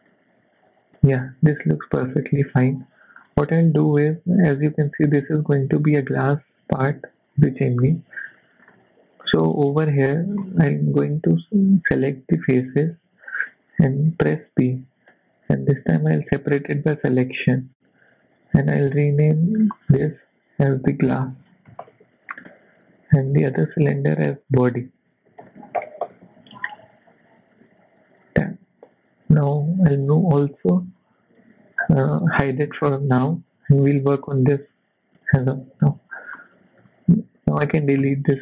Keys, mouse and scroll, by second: 0.0 Tab, 0.0 scroll down 3, 0.1 middle click, 1.5 KP_1, 2.2 shift+middle click, 2.9 Tab, 3.2 scroll up 3, 3.4 shift+middle click, 7.9 click, 8.4 shift+middle click, 8.6 shift+scroll up 3, 9.3 click, 10.0-10.6 scroll up 3, 10.1 shift+middle click, 14.3 p, 17.0 scroll down 3, 17.4 shift+middle click, 19.6 click, 19.8 click, 21.7 s, 23.3 click, 23.5 click, 28.0 Tab, 28.5 click, 29.3 scroll down 2, 29.9 m, 31.8 scroll down 2, 32.8 scroll up 4, 32.8 h, 33.3 shift+middle click, 33.7 click, 35.1 click, 35.7 z, 36.1 scroll down 2, 36.4 middle click, 37.2 click, 38.0 x.